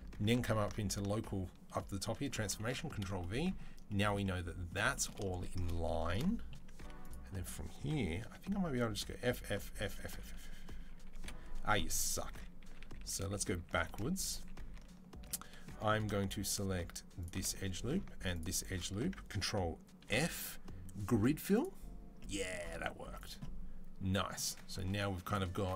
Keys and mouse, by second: 0.1-2.5 ctrl+drag, 2.4 ctrl+v, 2.5 middle click, 3.5 shift+click, 3.9 middle click, 4.6 shift+click, 4.9-6.9 shift+middle drag, 6.6 2, 6.9-8.1 drag, 8.1-11.9 middle drag, 8.1-10.9 typing, 12.1 ctrl+z, 12.5 ctrl+z, 12.7 ctrl+z, 12.9 ctrl+z, 13.0 ctrl+z, 13.2 ctrl+z, 13.4 ctrl+z, 13.6 ctrl+z, 13.7 ctrl+z, 13.9 ctrl+z, 14.1 ctrl+z, 14.4 ctrl+z, 15.1-23.0 middle drag, 19.9 ctrl+f, 22.9 Tab, 23.0 click, 23.3-25.7 middle drag.